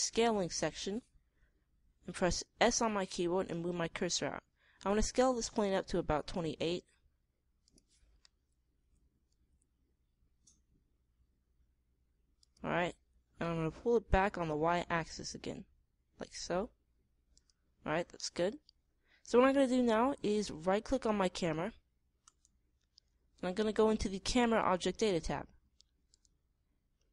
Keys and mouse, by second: 3.1 s, 9.8 s, 13.9 g, 14.4 click, 17.9-19.8 middle drag, 22.7-23.9 right drag, 23.9 middle click, 26.5-27.1 middle drag.